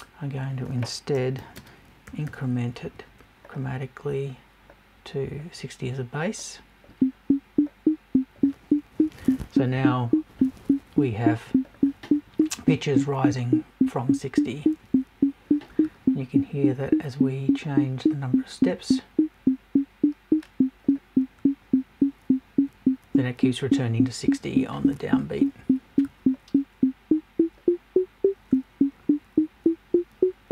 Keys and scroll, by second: 9.0 Left.